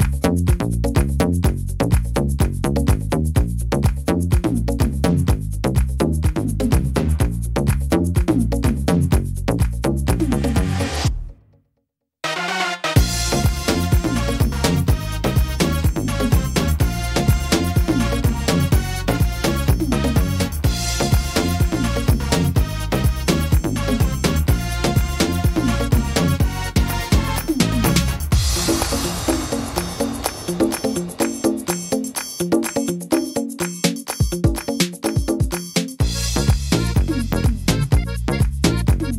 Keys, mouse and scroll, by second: 0.1 middle click, 1.5 click, 2.6 right click, 3.5 right click, 4.3 click, 5.9 middle click, 6.4 shift+middle click, 7.0 middle click, 7.3-7.9 scroll down 2, 7.7 middle click, 8.3 middle click, 8.6-9.7 scroll up 2, 9.7 right click, 10.7 click, 12.1 right click, 13.0 click, 14.8 right click, 15.9 click, 17.9 click, 19.6 shift+middle click, 21.3 click, 22.6 right click, 23.6 click, 25.6 click, 27.3 click, 28.5 right click, 29.2 click, 31.1 click, 32.6 click, 33.8 right click, 34.7 click, 36.8 click, 38.0 middle click, 38.7 shift+middle click.